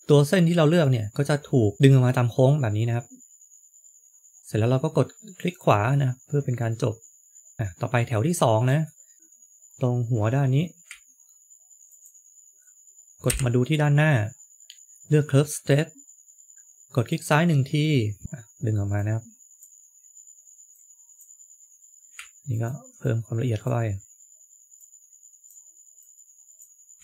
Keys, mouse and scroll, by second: 1.8 middle click, 5.8 middle click, 11.8 ctrl+click, 13.2 KP_1, 18.2-18.8 scroll up 2, 26.8-27.0 scroll down 2.